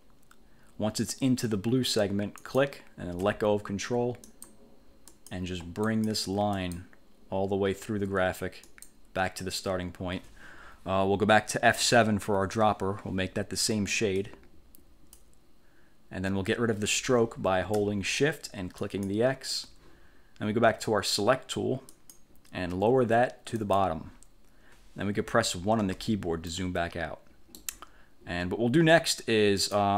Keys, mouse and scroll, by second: 2.6 ctrl+click, 4.4 click, 5.2 click, 6.0 click, 6.7 click, 8.8 click, 12.4 F7, 14.3 click, 19.0 shift+click, 22.0 click, 23.7 click, 25.9 1, 26.6-27.9 drag, 29.7 click.